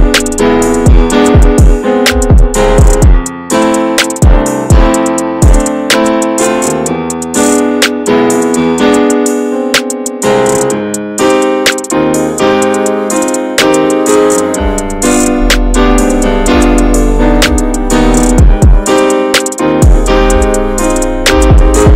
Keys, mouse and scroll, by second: 4.4 scroll down 3, 4.5 middle click, 4.6 scroll up 2, 5.2 scroll up 1, 5.7 scroll up 1, 5.9 scroll down 1, 6.1 shift+middle click, 6.3 scroll up 1, 6.5-9.2 shift+middle drag, 9.2-15.3 drag, 15.3 scroll down 1, 15.4 shift+middle click, 16.1 shift+middle click, 16.2-17.4 scroll up 1, 17.4-21.9 drag.